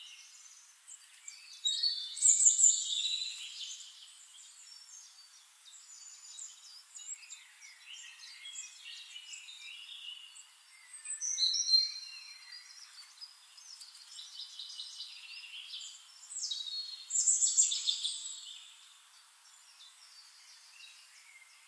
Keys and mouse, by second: 4.1 click, 5.4-9.4 drag, 9.7-11.5 drag, 10.4-11.5 middle drag, 10.4-11.5 right drag, 12.6 click, 13.9-16.1 drag, 14.8-16.1 shift+right drag, 16.3 click, 17.6 click, 18.8-20.0 middle drag, 21.5 click.